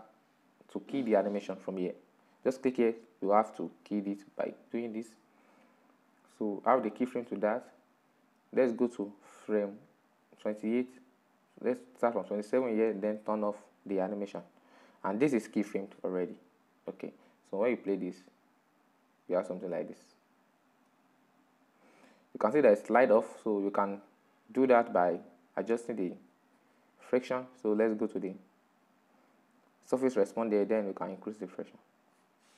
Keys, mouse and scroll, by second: 7.3-9.1 drag, 9.1 Left, 9.5 Left, 10.5 Left, 13.7 click, 16.6-20.5 drag, 22.4-25.6 drag, 25.7 right click, 29.3-32.5 drag.